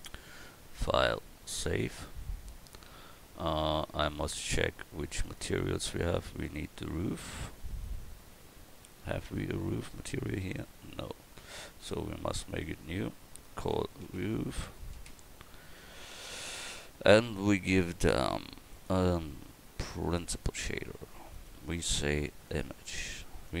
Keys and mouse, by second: 5.4-23.6 drag.